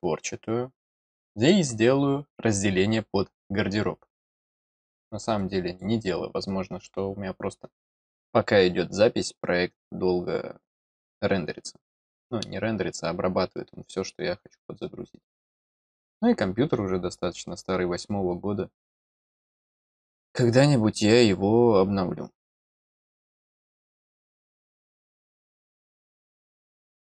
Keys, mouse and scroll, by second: 5.3 click.